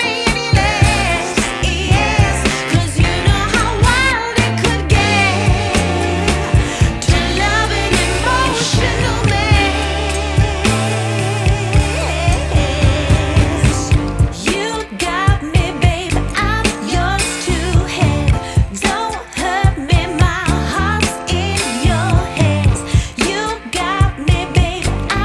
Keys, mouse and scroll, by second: 0.0 click, 0.5 middle click, 0.6 click, 0.8 click, 1.3 click, 1.5 shift+d, 2.0 click, 2.3 click, 2.5 click, 2.8 click, 3.2 click, 3.7 shift+click, 3.9 click, 4.0 shift+d, 4.4 click, 4.7 drag, 11.5 click, 12.1 click, 12.5 click, 12.7 click, 13.3 click, 13.8 shift+a, 14.4 middle click, 14.5 shift+middle click, 14.9 click, 15.1 click, 16.0 click, 16.4 click, 17.3 click, 17.9 click, 18.3 click, 18.6 click, 21.6 shift+middle click, 21.8 shift+click, 25.0 click.